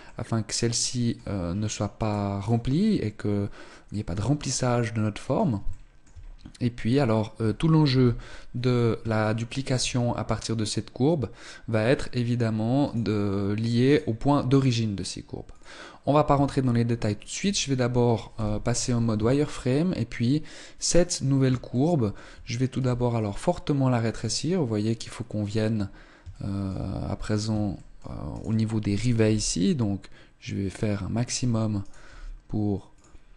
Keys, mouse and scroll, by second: 1.6 right click, 2.0 right click, 3.6 middle click, 5.3 shift+middle click, 5.8 scroll up 3, 7.6 KP_1, 8.2-8.7 scroll down 3, 8.8 shift+middle click, 9.6-10.8 scroll down 1, 12.5 right click, 13.5 right click, 15.2 click, 16.0 Tab, 16.4-17.0 scroll up 2, 17.0 Tab, 17.9 z, 18.8 Tab, 20.4 scroll up 1, 21.4 shift+middle click, 22.2 s, 25.1 click, 25.4-26.4 scroll down 2, 25.5 shift+middle click, 26.4-27.2 scroll up 1, 27.2 shift+middle click, 27.2 right click, 28.9 g, 31.4 right click, 31.7 g, 32.6 click, 33.2 right click.